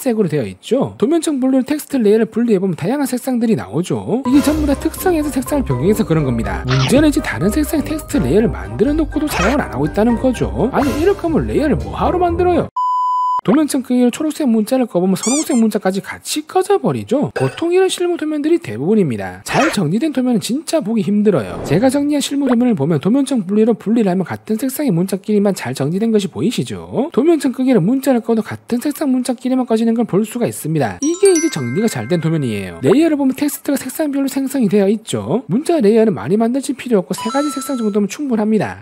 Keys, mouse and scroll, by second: 1.3 click, 1.3 right click, 1.8 click, 1.8 right click, 2.1 right click, 2.5-2.8 scroll down 2, 3.1 middle click, 3.8 scroll down 1, 4.2-5.6 scroll up 5, 5.6 scroll down 2, 6.2 middle click, 6.7 scroll down 1, 7.0 middle click, 7.7 scroll up 1, 7.9 middle click, 8.9 right click, 11.6 click, 14.5 right click, 15.3 right click, 15.9 scroll up 1, 22.3 click, 22.5 right click, 24.3 click, 24.7 click, 25.1 scroll up 1, 25.3 scroll down 1, 25.6 middle click, 26.0 middle click, 26.4 scroll up 1, 27.6 click, 29.3 click, 29.8 scroll up 1, 31.1 right click, 33.4 click.